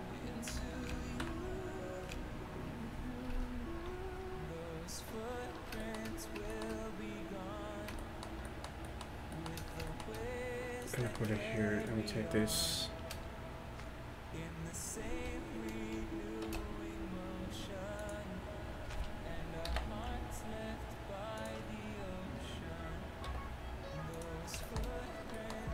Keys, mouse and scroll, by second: 0.6 KP_1, 0.9 KP_5, 1.3 KP_5, 10.9-15.1 drag, 11.9-15.1 right drag, 16.5 shift+d, 19.7 alt+p, 23.3 g.